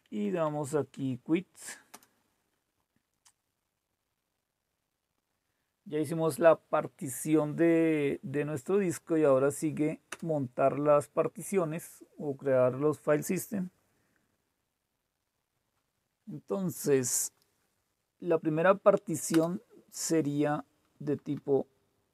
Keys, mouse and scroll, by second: 0.1 Left, 0.2 Left, 0.4 Left, 0.9 Right, 1.9 Return, 10.1 Return, 19.3 Return, 20.8 Down, 21.1 Down, 21.2 Down.